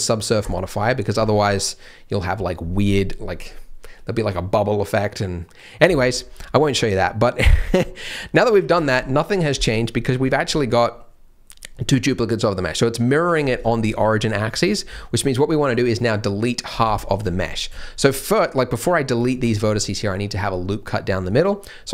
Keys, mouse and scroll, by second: 0.4 click, 6.1-6.9 scroll up 1, 6.9-7.5 scroll down 1, 7.5 middle click, 8.5 Tab, 8.7 Tab, 9.8 middle click, 10.2 a, 10.4 g, 13.3 scroll down 1, 13.6 shift+middle click, 14.1-14.6 scroll down 1, 14.6 scroll up 1, 14.9 shift+middle click, 17.3-17.6 scroll up 1, 17.8 shift+middle click, 18.0-18.7 scroll up 1, 18.7 click.